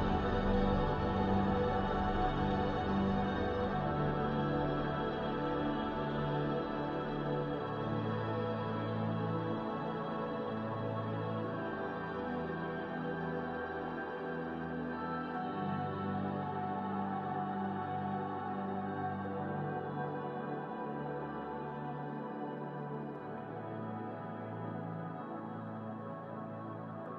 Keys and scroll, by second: 5.8 space, 8.6 space, 10.1 space, 13.0 space.